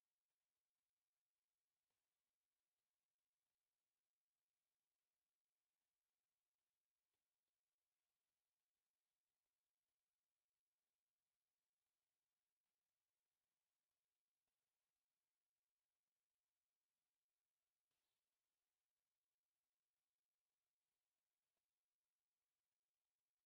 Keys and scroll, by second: 4.6 Escape, 6.5 s, 7.5 s, 7.6 space, 8.3 1, 9.5 Escape, 11.7 Escape, 13.6 Escape, 14.8 s, 14.9 space, 15.3 Escape, 17.7 Escape, 20.2 Escape, 23.1 Escape.